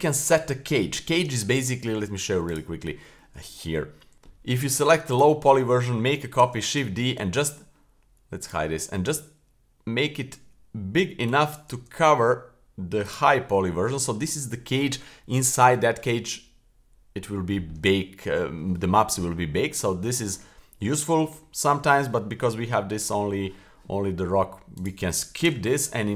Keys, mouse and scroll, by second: 1.6-2.4 right drag, 2.5 click, 4.1 shift+d, 4.1 shift+s, 5.1 click, 6.4 shift+d, 8.4 click, 9.0 s, 11.8 s, 13.4-14.2 middle drag, 14.2-14.8 middle drag, 17.9-18.4 middle drag, 19.4-19.8 middle drag, 24.8 click, 25.4 Delete.